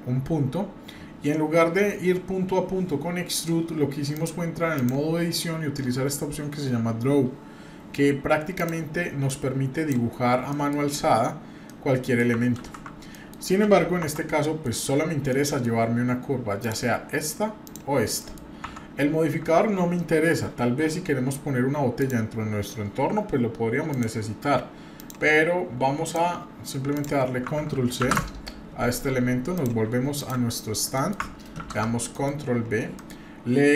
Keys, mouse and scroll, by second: 4.1-4.9 drag, 8.5 click, 9.3 click, 10.5 middle click, 10.8-11.5 scroll up 1, 11.6 middle click, 12.6 ctrl+z, 13.1 middle click, 13.4-14.0 scroll down 1, 14.0 Tab, 14.4 middle click, 14.7-15.6 scroll down 3, 15.3 middle click, 16.6 click, 17.6 click, 18.2 middle click, 18.6 Tab, 19.4 Tab, 22.0 click, 23.9 click, 24.9 click, 26.0 click, 26.9 click, 28.0 ctrl+c, 30.9 middle click, 31.6 ctrl+v, 32.1 middle drag, 32.5 scroll down 1, 33.0 middle click.